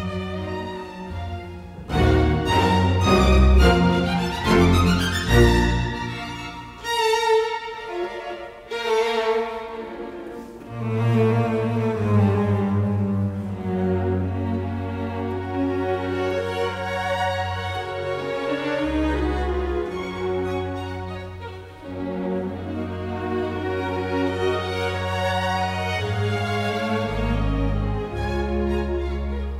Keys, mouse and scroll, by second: 0.4 space, 8.3 Escape, 18.3 f, 18.5 space, 24.0 KP_Decimal, 24.4 KP_5, 24.4 Return, 24.9 space, 28.6 ctrl+z.